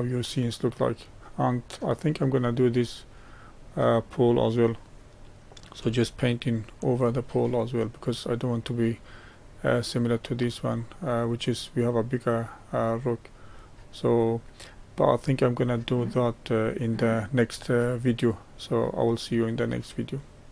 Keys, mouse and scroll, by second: 2.0 click, 2.7-7.3 middle drag, 7.3-9.4 scroll up 3, 9.4-10.7 scroll up 1, 10.7-20.5 middle drag.